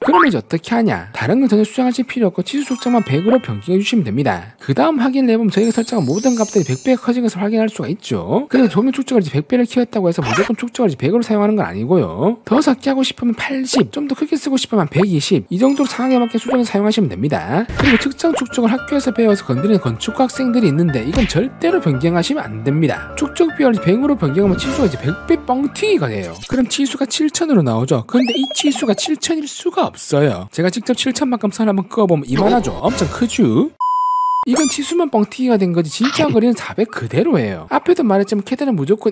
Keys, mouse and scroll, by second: 0.7 click, 2.6 click, 4.0 click, 4.8 scroll up 1, 5.7 scroll down 1, 6.9 w, 7.1 right click, 7.6 click, 8.0 click, 8.4 click, 8.6 scroll up 1, 9.1 middle click, 9.6 middle click, 10.2-11.5 middle drag, 12.5 click, 13.6 click, 14.0 click, 15.0-15.7 typing, 15.0 click, 16.3 click, 16.9 click, 22.6 click, 26.9 middle click, 29.9 right click, 30.1 click, 30.9 right click, 31.9-32.9 typing, 32.2 right click, 32.5 right click, 38.9 click.